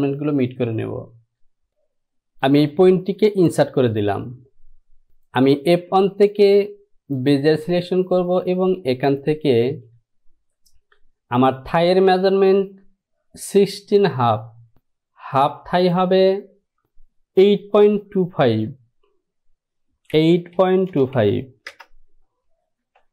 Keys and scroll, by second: 20.3 KP_8, 20.7 KP_Decimal, 21.0 KP_2, 21.3 KP_5, 21.8 Return.